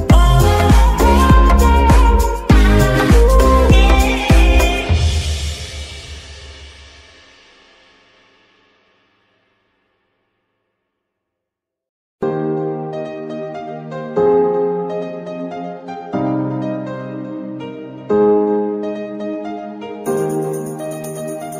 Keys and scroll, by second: 12.2-13.9 typing, 14.8 Return, 17.1 KP_3.